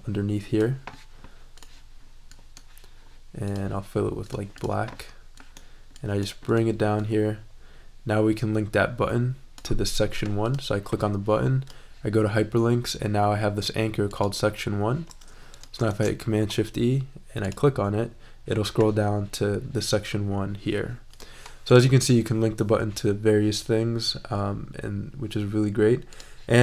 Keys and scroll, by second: 15.8 shift+super+e.